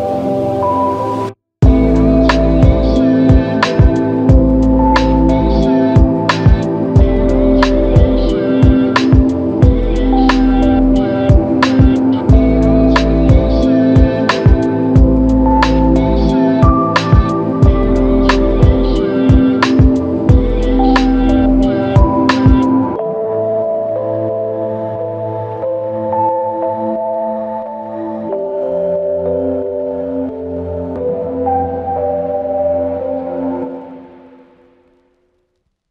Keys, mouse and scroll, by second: 7.4 ctrl+click, 9.7 ctrl+click, 11.4 ctrl+click, 11.6 alt+click, 28.3 ctrl+alt+click, 32.4 ctrl+click.